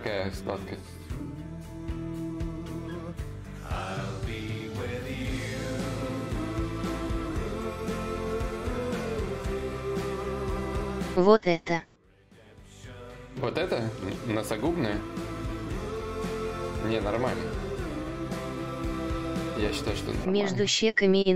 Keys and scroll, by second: 3.7 b, 4.9 i, 7.5-11.0 typing, 13.8 s, 15.8 ctrl+z, 18.8 d, 20.4 shift+d.